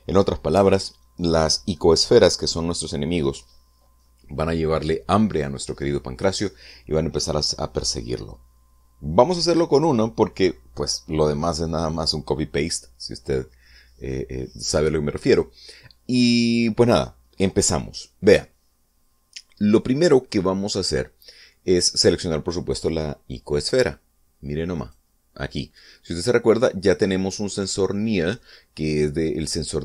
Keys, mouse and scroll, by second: 25.7 right click.